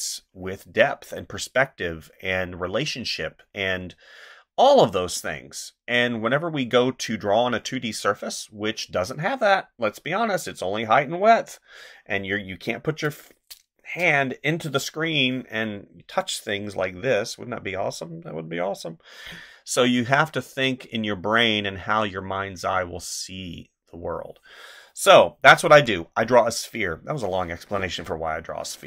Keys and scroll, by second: 25.7 space.